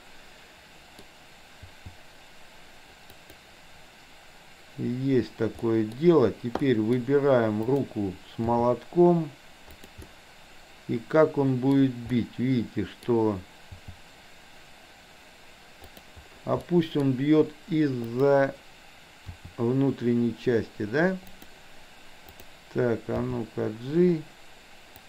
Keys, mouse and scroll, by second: 1.8 g, 5.7-6.1 middle drag, 6.7 middle drag, 7.8 click, 8.4 g, 10.1-11.8 middle drag, 12.2-13.1 middle drag, 13.8 g, 16.7 middle click, 19.4 r, 22.3 click, 23.3 g.